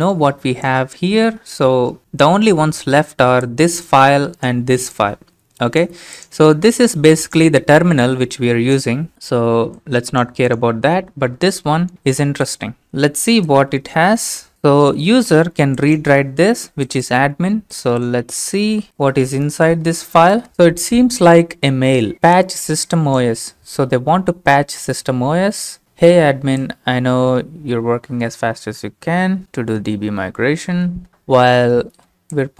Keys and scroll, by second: 13.0-14.3 typing, 18.7-19.8 typing, 19.8 ctrl+v, 20.3 Return.